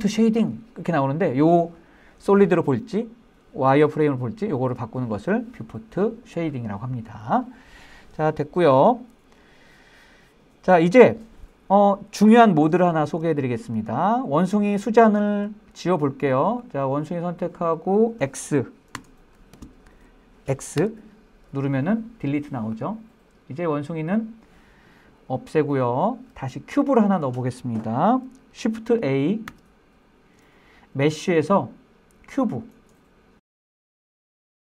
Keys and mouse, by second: 13.3-13.7 shift+middle drag, 13.8-14.4 middle drag, 15.5-16.0 shift+middle drag, 16.0 middle click, 17.0-19.4 drag, 19.4 z, 21.2 x, 29.9 shift+a.